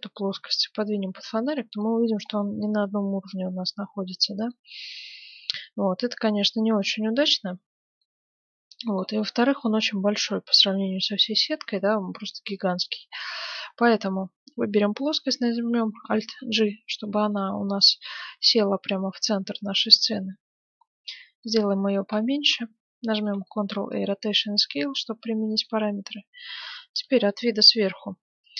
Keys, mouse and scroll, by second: 0.1 g, 1.9-4.7 middle drag, 4.9-8.3 middle drag, 8.7-10.7 middle drag, 10.7-11.2 scroll up 1, 11.2-13.6 middle drag, 13.6-14.0 scroll down 1, 14.0-15.4 middle drag, 15.9 alt+g, 16.6-19.7 middle drag, 18.5 s, 22.3-23.7 middle drag, 23.5 ctrl+a, 24.4-26.4 middle drag, 26.4 KP_7, 26.8-28.5 middle drag, 27.8 a.